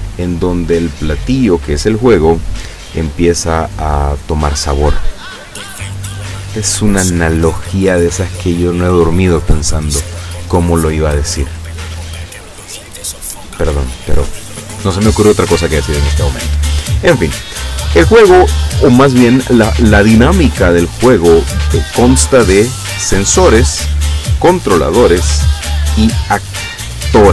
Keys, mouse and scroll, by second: 25.4 click.